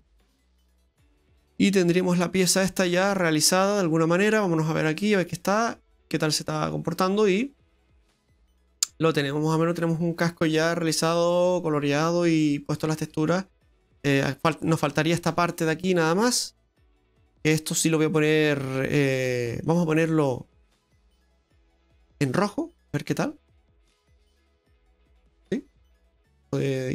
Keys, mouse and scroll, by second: 0.3 Tab, 0.6-1.2 scroll down 4, 1.2 middle click, 2.6 scroll down 2, 2.8 middle click, 3.8-4.3 scroll down 2, 5.2 click, 5.5-6.3 scroll down 2, 5.9 middle click, 6.6 right click, 7.3 middle click, 14.5-14.9 scroll up 5, 15.0 shift+middle click, 15.4-16.2 scroll up 2, 16.5 right click, 19.7 click, 23.0 click, 25.3-26.9 scroll down 8, 26.3 middle click.